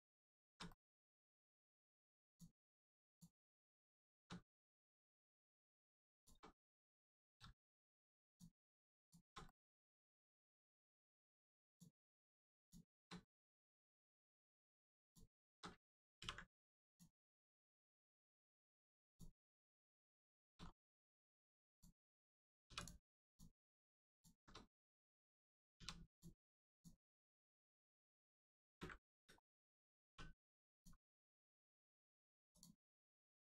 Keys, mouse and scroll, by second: 0.6 shift+middle click, 2.2 alt+shift+click, 3.0 alt+shift+click, 3.7 alt+shift+middle click, 4.5 alt+middle click, 4.5 middle click, 6.1 alt+shift+click, 6.5 alt+middle click, 8.2 alt+shift+click, 8.9 alt+shift+click, 9.4 alt+middle click, 10.3-10.9 scroll down 1, 11.6 alt+shift+click, 13.1 alt+middle click, 14.9 alt+shift+click, 15.7 ctrl+alt+click, 16.1 ctrl+e, 16.9 click, 17.3 middle click, 18.2-18.5 scroll up 1, 18.5 middle click, 19.0 click, 19.5 middle click, 19.8 scroll down 1, 19.9 scroll up 1, 20.2 shift+middle click, 20.5 scroll up 1, 21.7 click, 22.6 3, 22.7 click, 23.2 alt+click, 24.0 alt+shift+click, 25.7 shift+click, 26.0 click, 26.7 shift+click, 27.4 scroll up 1, 27.7 shift+middle click, 28.5 ctrl+middle click, 28.6 ctrl+space, 29.5 shift+middle click, 30.7 click, 31.7 middle click, 32.5 click.